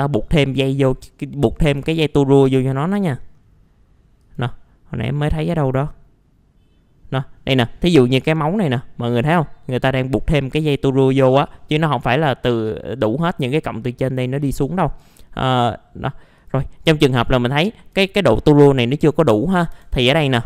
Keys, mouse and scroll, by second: 0.1-1.6 scroll down 1, 1.6 Escape, 2.3-4.2 scroll down 1, 4.2-5.3 drag, 17.0 middle click, 17.1 scroll down 1, 17.3 alt+middle click, 18.5 middle click, 19.7 F4.